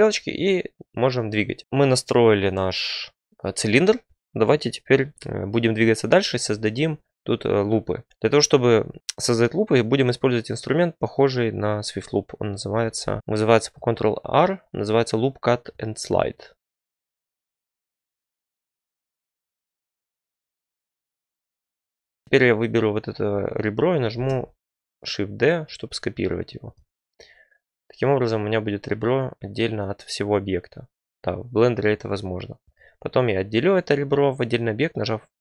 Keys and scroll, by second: 12.9 ctrl+r, 16.6 ctrl+r, 21.7 2, 24.1 d, 31.8 p.